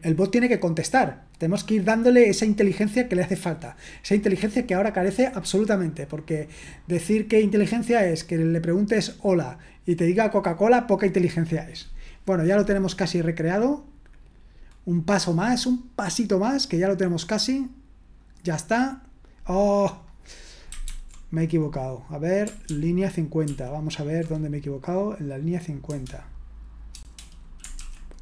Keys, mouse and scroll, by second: 18.2-19.2 drag, 20.0 click, 20.8 ctrl+c, 22.7 ctrl+p, 23.4 ctrl+p, 28.0-28.2 typing.